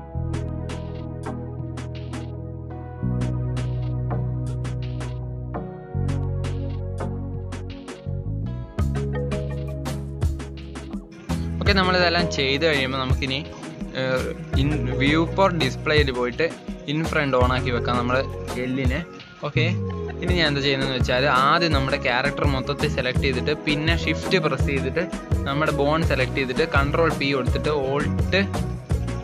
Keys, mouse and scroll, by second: 1.7 click, 2.6 click, 3.4 ctrl+z, 4.2 click, 5.0 shift+middle click, 5.7 KP_3, 6.0 shift+middle click, 6.6 click, 6.9 click, 7.6 click, 7.9 click, 8.4 click, 8.7 click, 9.7 Tab, 9.9 scroll down 3, 10.0-11.0 middle drag, 11.0 click, 11.4 click, 11.9 click, 12.3-14.1 middle drag, 14.1-15.5 drag, 15.8-16.2 scroll down 10, 17.0 scroll up 2, 17.4-18.0 scroll down 3, 18.0-19.0 drag, 19.4-20.5 drag, 21.2 middle click, 22.1 click, 22.5 middle click, 23.0 click, 23.8 shift+click, 24.6 shift+click, 25.8 ctrl+p, 27.5 click, 27.9 click, 28.7 ctrl+Tab.